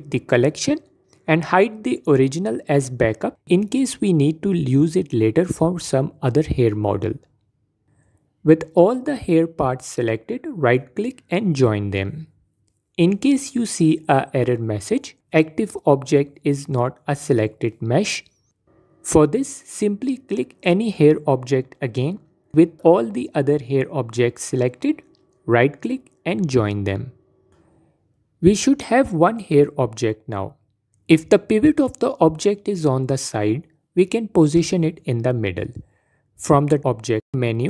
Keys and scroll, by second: 35.3 ctrl+z.